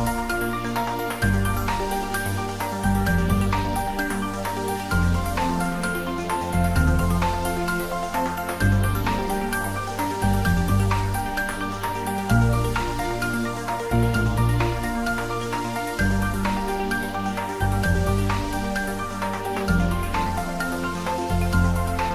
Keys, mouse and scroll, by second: 0.8-2.6 drag, 2.6-7.6 drag, 8.8 shift+click, 10.4 shift+click, 13.8 ctrl+z, 14.7 shift+click, 20.4 click, 21.8 shift+z.